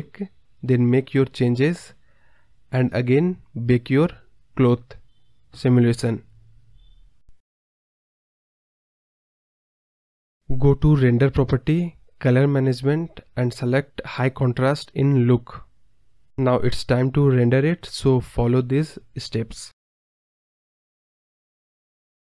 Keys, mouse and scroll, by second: 0.0 space, 0.2 click, 2.2 click, 2.9 space, 3.1 space, 3.7 ctrl+z, 3.9 ctrl+z, 11.9 scroll down 7, 12.1 click, 13.5-16.4 drag, 17.8 click, 18.3-21.3 drag.